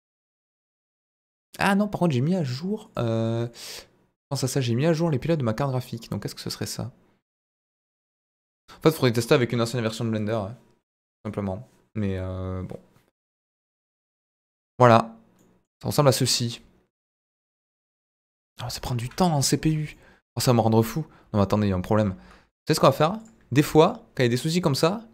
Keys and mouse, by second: 4.8 middle drag, 5.2 click, 6.1-6.7 middle drag, 14.5 click, 15.3-15.7 middle drag, 17.5 middle drag, 19.0 KP_1, 21.5 middle click, 22.0 z.